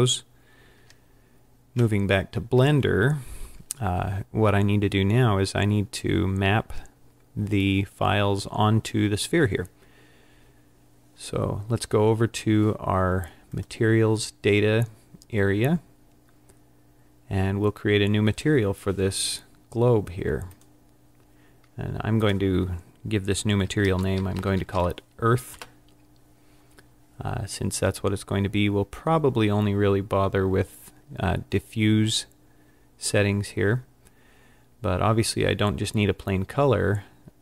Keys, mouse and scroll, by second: 13.6 click, 20.6 click, 22.2 click.